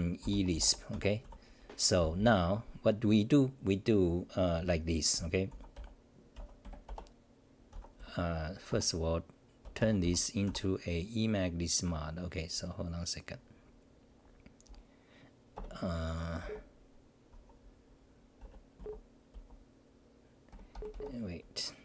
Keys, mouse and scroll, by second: 2.0 v.